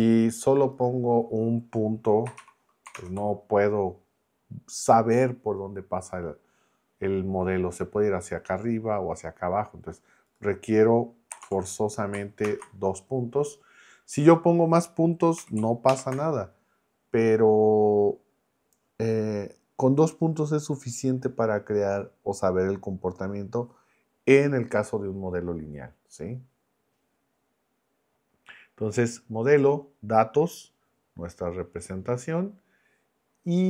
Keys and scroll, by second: 2.2 BackSpace, 2.4 1, 2.9 ctrl+Return, 11.3 BackSpace, 11.4 2, 12.4 ctrl+Return, 15.4 0, 15.9 ctrl+Return.